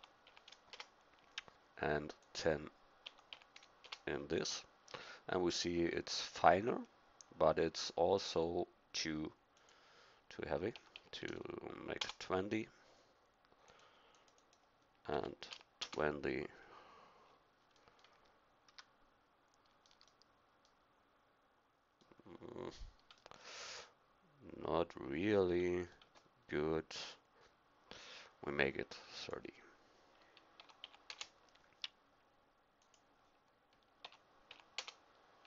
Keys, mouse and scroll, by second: 2.2 click, 18.7 a, 23.3-25.1 middle drag, 32.8-34.7 drag.